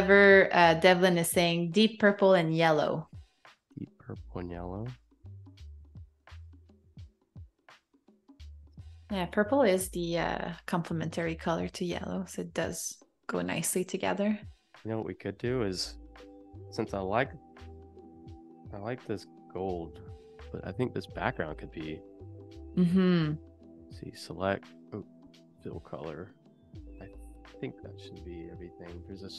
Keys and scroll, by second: 5.8 super+z, 13.2 super+-, 14.0 v, 16.6 super+g, 18.7 a.